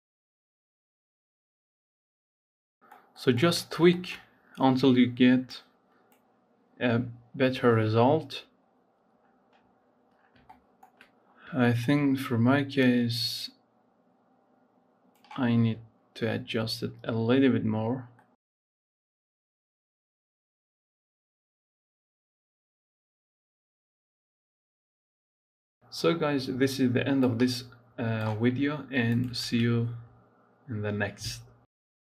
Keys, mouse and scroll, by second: 0.0 shift+middle click, 0.1-0.6 scroll up 3, 0.6 click, 1.5 scroll down 3, 1.6 shift+middle click, 1.7 scroll up 5, 1.9 click, 2.6 scroll down 3, 2.7 shift+middle click, 3.4-4.2 scroll up 6, 3.9 shift+middle click, 5.5-8.3 drag, 8.3 scroll up 4, 9.9-10.3 scroll down 5, 10.3 shift+middle click, 11.2-11.5 scroll up 4, 11.5 shift+middle click, 11.9-13.0 scroll up 1, 13.0-16.1 drag, 16.1-18.0 scroll down 4, 18.0 middle click, 18.5 scroll down 9, 18.8 shift+middle click, 18.9-19.8 scroll up 6, 19.0 shift+middle click, 19.4 shift+middle click, 19.8 middle click, 20.4 click, 22.9-23.4 scroll down 6, 23.4-24.1 scroll up 6, 24.3 scroll down 4, 24.6 scroll up 7, 24.8-26.0 drag, 26.7 click, 28.7-29.5 scroll down 5, 29.5 scroll up 4, 30.1 scroll down 1, 30.2 click, 30.5-31.8 middle drag, 31.8 scroll up 3.